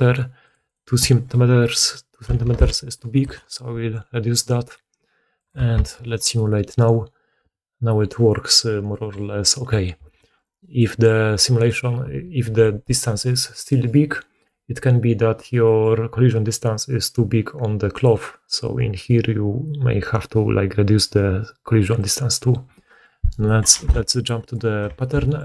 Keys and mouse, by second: 5.7 shift+space, 10.0 shift+space, 10.3 middle click, 10.3 right click, 15.8-23.9 middle drag, 23.7 2, 24.0 middle click, 24.3 middle click, 24.3 right click.